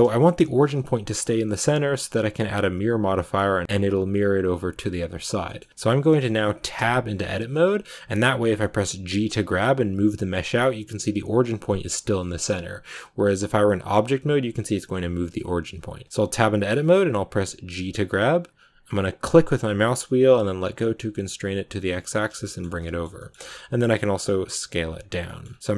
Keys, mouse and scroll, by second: 1.3-4.0 middle drag, 4.0-4.6 scroll up 1, 4.6-5.4 scroll down 1, 5.4-22.6 middle drag, 22.6 scroll down 2, 22.7 middle click, 23.5 s, 25.4-25.7 scroll up 2.